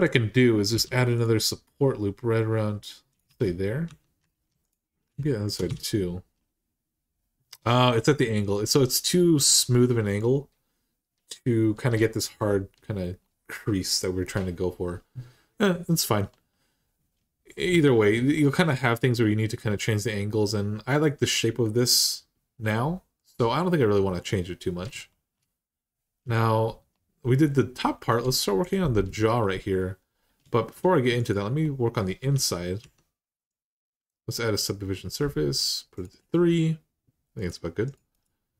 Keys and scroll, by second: 0.5 ctrl+r, 3.1 Tab, 3.7 Tab, 4.1 ctrl+r, 5.5 Tab, 10.3 Tab, 17.5 Caps_Lock, 32.0 Tab, 32.6 Tab.